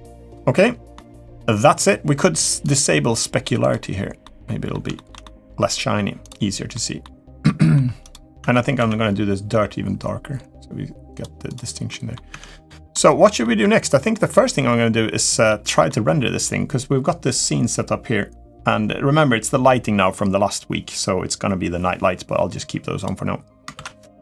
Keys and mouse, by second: 0.3-0.7 middle drag, 2.4-3.7 drag, 4.0-4.5 middle drag, 4.7 shift+middle drag, 5.0 middle drag, 6.0 drag, 6.5 middle drag, 7.2 middle click, 7.8 click, 8.2 Tab, 8.5 a, 9.6 g, 11.6 middle click, 12.1 Tab, 12.4 middle drag, 13.2 shift+middle drag, 13.9 middle drag, 15.2-15.7 middle drag, 23.5 ctrl+s.